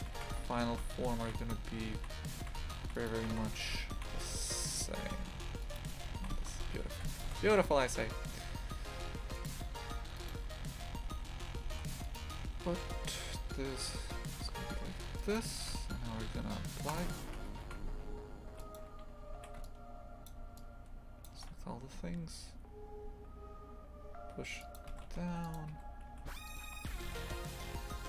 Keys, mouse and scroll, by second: 2.4 shift+f, 7.5 shift+f, 10.2 right click, 10.7 Tab, 11.1 a, 11.7 ctrl+r, 15.7 Tab, 17.0 click, 17.3 Tab, 17.6 shift+f, 18.9 1, 19.3 a, 20.2 shift+click, 21.2 shift+click, 22.0 s, 24.9 shift+f, 25.7 2, 26.1 a, 26.4 alt+shift+right click, 27.1 g.